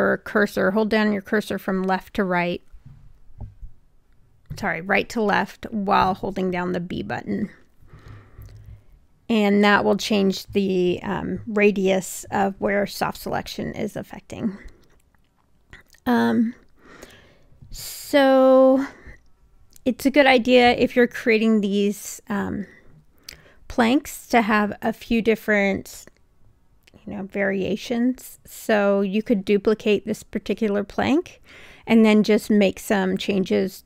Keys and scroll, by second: 8.9 r, 25.4 w.